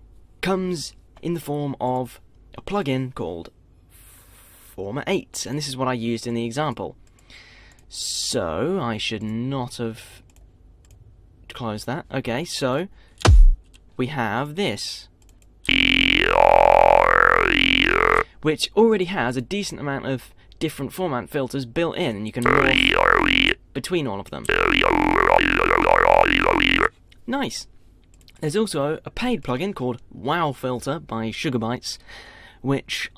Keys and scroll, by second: 1.5 F1.